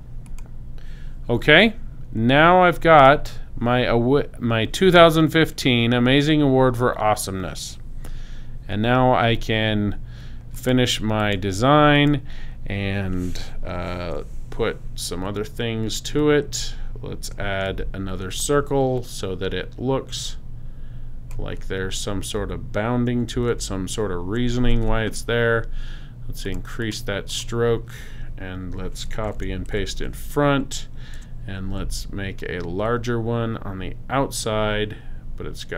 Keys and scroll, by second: 14.0 i, 23.5 shift+x, 29.3 super+c, 29.7 super+f, 31.2 v, 31.8 alt+shift+v.